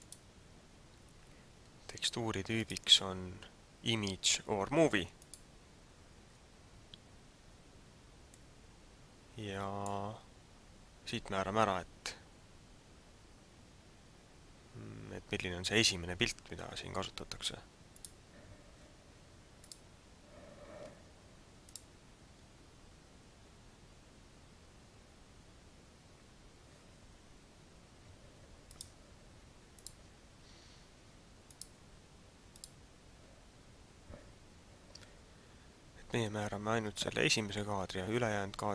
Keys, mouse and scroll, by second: 0.0 click, 2.5 click, 8.3 click.